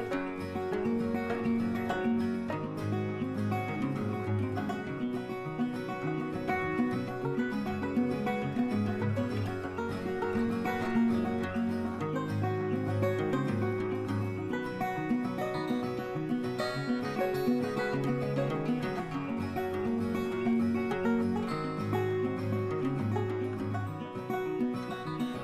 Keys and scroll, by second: 24.6 ].